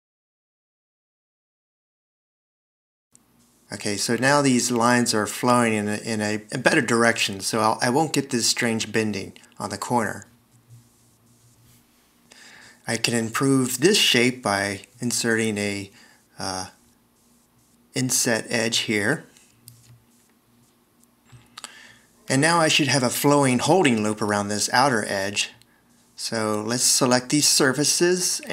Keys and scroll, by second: 0.1 c, 8.4 v, 10.7 alt+e, 17.3 shift+e, 23.5 d.